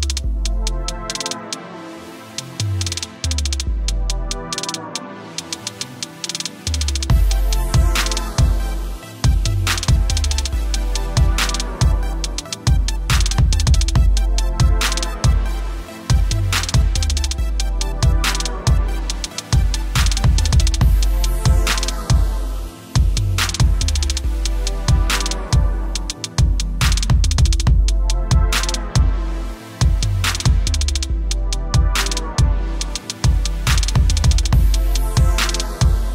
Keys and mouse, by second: 10.1 KP_0, 11.8 0, 12.3 click, 22.6 click, 32.2 click.